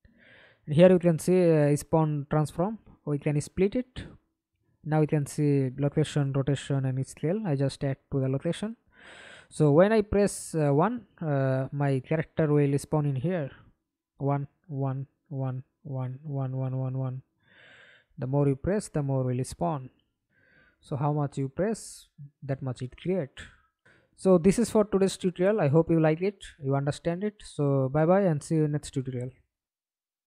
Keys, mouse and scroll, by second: 3.0 right click, 4.3 right click, 8.5 double click, 9.8 middle click, 10.6 F11, 11.2 alt+p, 12.6 s, 13.9-18.6 typing, 19.6-25.2 typing, 30.0 alt+F9.